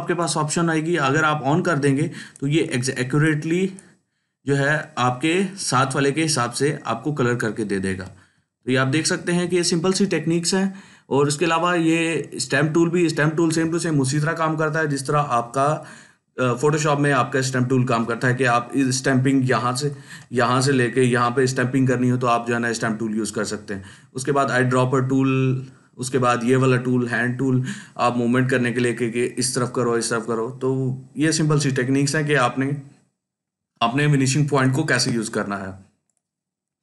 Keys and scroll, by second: 8.2 ctrl+alt+z, 8.8 ctrl+alt+z.